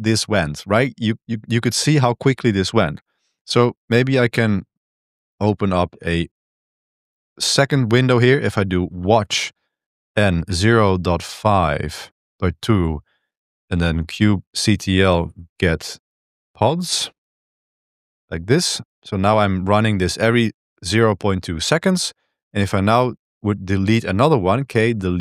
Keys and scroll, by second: 4.3 ctrl+b, 4.7-7.0 typing, 8.5-19.0 typing, 18.9 ctrl+b, 22.9-25.2 typing.